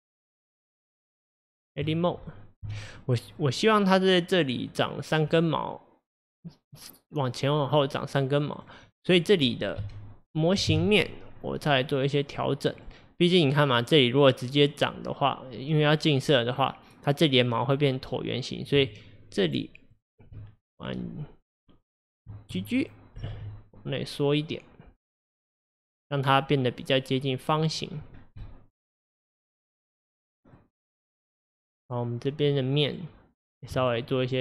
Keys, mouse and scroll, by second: 0.3-1.1 middle drag, 1.1 Tab, 2.7 KP_1, 3.4-8.4 middle drag, 8.6 click, 8.9 middle click, 9.9 KP_1, 10.7 KP_7, 11.4-12.8 scroll up 2, 12.8 click, 18.9 ctrl+click, 19.5 ctrl+click, 20.0 ctrl+click, 23.2 g, 28.2 scroll down 1, 28.5-31.5 middle drag, 31.9 click, 32.6-33.8 middle drag, 33.8 ctrl+click, 34.3 ctrl+click.